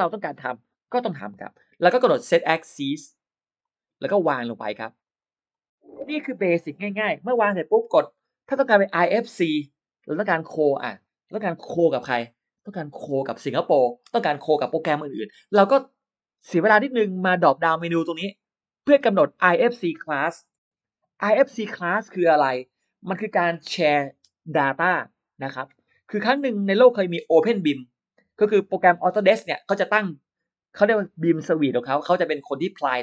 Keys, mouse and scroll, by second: 3.4 click, 4.7 click, 4.9 click, 5.0 click, 5.4 click, 18.7 click.